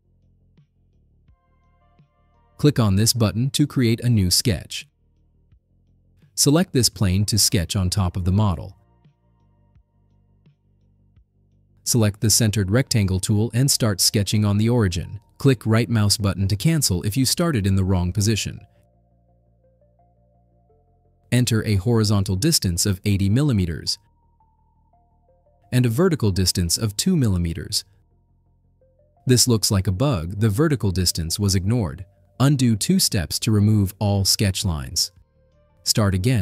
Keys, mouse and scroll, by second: 4.8 click, 7.9 click, 9.6 middle drag, 10.0-10.4 right drag, 12.4 click, 14.0 click, 16.3 right click, 19.7 click, 23.7 8, 24.0 0, 26.1 Tab, 27.1 2, 28.9 Return, 32.6 ctrl+z, 33.4 ctrl+z.